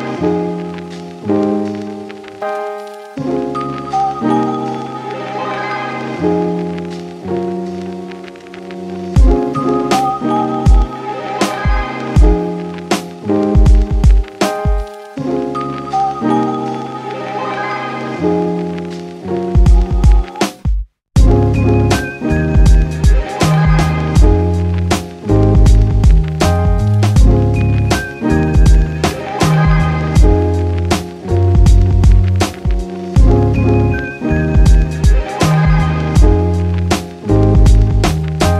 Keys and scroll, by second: 2.8 d, 16.0 ctrl+z, 16.3 ctrl+z, 20.1 ctrl+d, 21.4 j, 33.1 v.